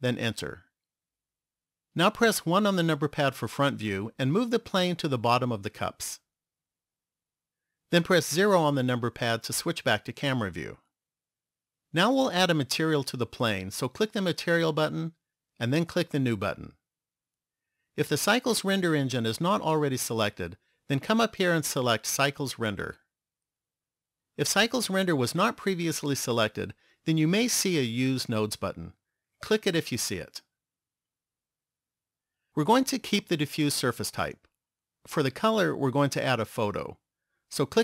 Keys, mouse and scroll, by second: 2.5 KP_1, 5.1 click, 7.1 click, 8.9 KP_0, 14.7 click, 16.4 click, 20.0 click.